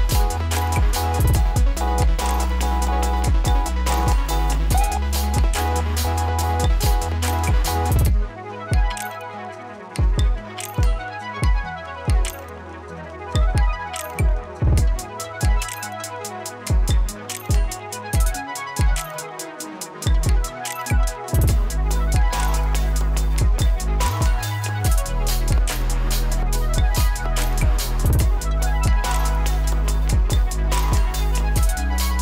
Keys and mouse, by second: 8.8 Return, 9.7 click, 11.6 typing, 13.8-19.8 drag, 19.8 ctrl+z, 20.7-23.2 drag, 23.5 space, 25.3-27.4 drag, 27.4 F9, 27.8 click, 28.2 space, 29.8-32.2 drag.